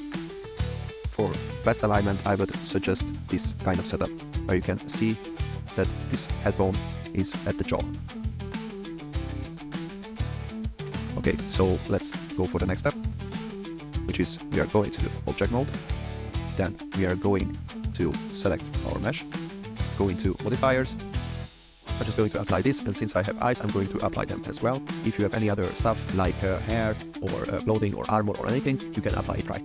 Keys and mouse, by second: 1.5 shift+middle click, 1.9 shift+middle drag, 5.0 g, 5.2 z, 6.5-7.0 drag, 10.3-10.8 middle drag, 13.5 click, 19.3 click, 21.9-22.3 drag, 22.7 shift+middle drag, 23.6 click, 24.3 drag, 25.4 click, 26.1 click, 26.9 click.